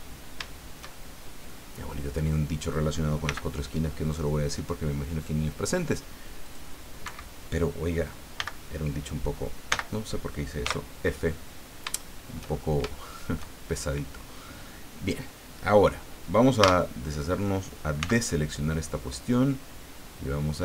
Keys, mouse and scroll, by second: 0.4-1.6 shift+middle drag, 1.7-2.0 scroll up 2, 3.2 c, 4.5 click, 6.4 click, 7.0 Escape, 8.4 n, 9.7 n, 10.6 f, 11.6-11.9 scroll down 3, 11.9 shift+middle click, 12.6 shift+scroll up 2, 12.9 shift+middle click, 13.7-14.0 shift+scroll up 3, 16.6 a, 18.0 c, 19.2-20.6 drag.